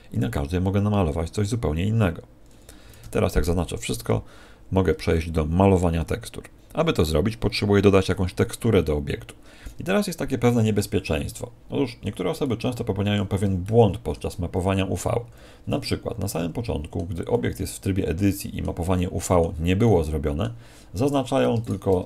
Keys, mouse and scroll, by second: 3.0 a, 10.6 middle click, 12.4 middle click, 13.6 shift+middle click, 15.2 a, 15.8 middle click, 21.0 right click, 21.6 shift+right click.